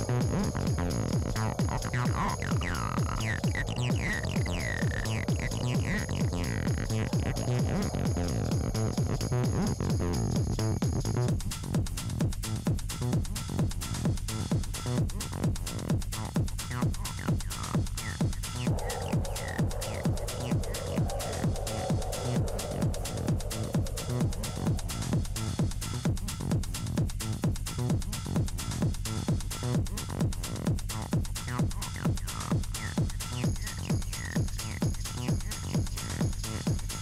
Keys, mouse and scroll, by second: 0.2 click, 3.5 KP_1, 3.8-4.4 scroll up 8, 5.0 click, 10.9-11.3 scroll down 3, 11.8 Tab, 12.7 e, 13.7 middle click, 14.0 scroll down 4, 14.7 a, 15.7 a, 17.2 KP_1, 17.5-18.0 scroll up 5, 18.9 e, 20.2 middle click, 20.6-20.9 scroll down 3, 21.0 click, 21.3 scroll down 1, 21.8 Tab, 22.4 KP_1, 22.8-23.3 scroll up 7, 23.9 click, 27.7-29.4 shift+middle drag, 29.5 click, 29.8-30.3 scroll down 6, 30.3-30.6 middle drag, 30.6 scroll down 1, 31.0-32.0 middle drag, 32.0-33.6 drag.